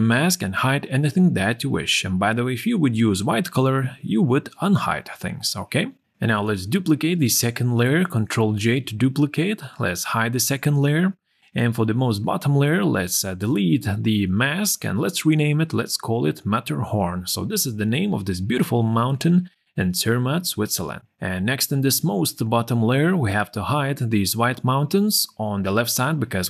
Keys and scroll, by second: 24.1 z.